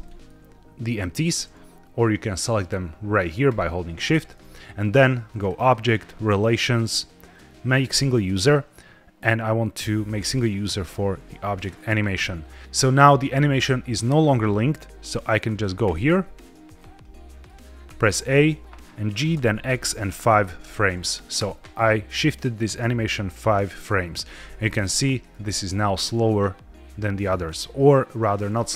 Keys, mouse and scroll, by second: 1.9 drag, 3.3 shift+click, 5.3-11.8 drag, 15.7 click, 16.6-17.0 scroll down 2, 17.0 middle click, 17.8 a, 19.2 g, 19.6 x, 20.0 KP_5, 21.2 KP_Enter, 22.7-24.0 drag, 24.5-25.3 middle drag, 26.2-28.2 middle drag, 28.5 shift+middle drag.